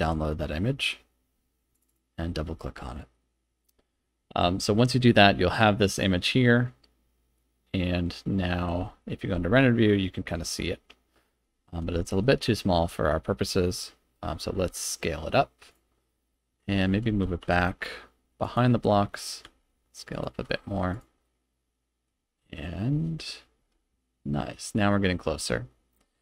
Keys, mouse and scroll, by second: 3.2-3.7 middle drag, 4.7-5.1 middle drag, 5.5 click, 5.9 click, 6.4-8.6 middle drag, 8.8 z, 11.4 z, 12.2-13.5 middle drag, 14.1 middle click, 14.5 s, 15.7 click, 16.1-16.6 middle drag, 16.9 g, 17.1 x, 17.4 y, 18.4 click, 18.8-19.2 middle drag, 19.4 s, 20.1 click, 20.3 g, 20.9 click, 20.9 z, 21.2-22.1 middle drag, 22.2 z, 23.7 KP_0, 24.9-25.6 scroll down 6, 26.0 z.